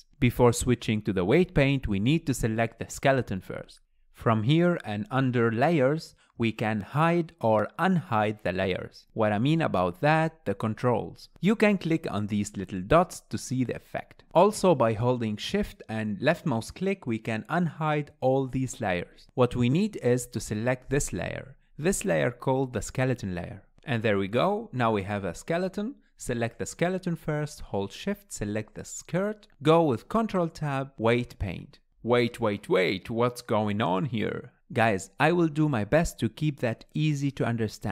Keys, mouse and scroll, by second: 0.9 click, 8.9 click, 9.9 click, 10.6 click, 11.1 click, 11.8 click, 13.3 click, 13.8 drag, 14.4 click, 15.8-20.4 shift+drag, 22.9 click, 25.9 scroll down 2, 26.1-26.8 shift+middle drag, 26.8 scroll up 1, 27.0-29.6 middle drag, 29.6 shift+click, 30.2 ctrl+Tab, 33.1-35.2 drag, 35.2-37.9 shift+middle drag.